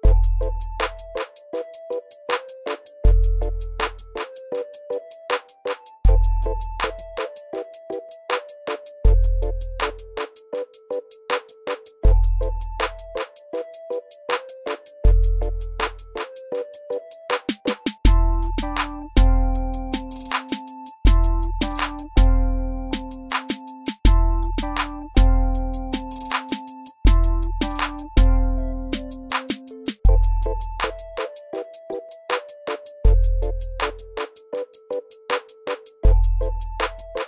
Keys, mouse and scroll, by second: 1.6 click, 2.4-3.2 typing, 5.2 click, 6.8-7.7 typing, 8.6 click, 10.8-11.7 typing, 12.5 click, 14.2-15.1 typing, 15.8 click, 19.7 x, 21.3 click, 23.9-25.2 drag, 26.1 shift+right click, 26.4 ctrl+scroll up 1, 26.6 shift+right click, 26.7-32.5 drag, 32.8 ctrl+z, 33.7 click, 34.2 z, 34.6-35.5 click, 35.5 ctrl+scroll down 1, 35.7 ctrl+scroll up 1, 35.9 v, 36.1 click, 36.6 F1, 36.7-37.2 drag.